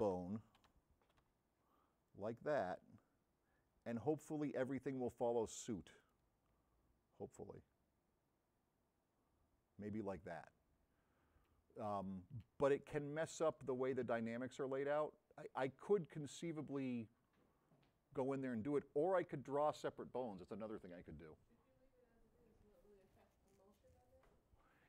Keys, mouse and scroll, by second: 0.6 v, 1.1 c, 2.2 x, 7.4 x, 13.1 v.